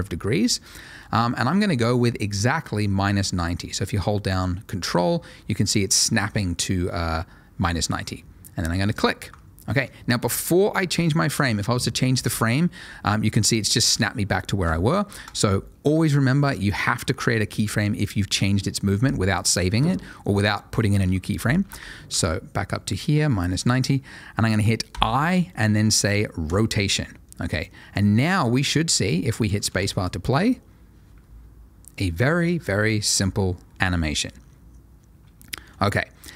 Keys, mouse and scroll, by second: 8.9 ctrl+click, 13.0 click, 21.6 r, 21.8 x, 23.8 ctrl+click, 24.9 i, 26.4 click, 29.6 space.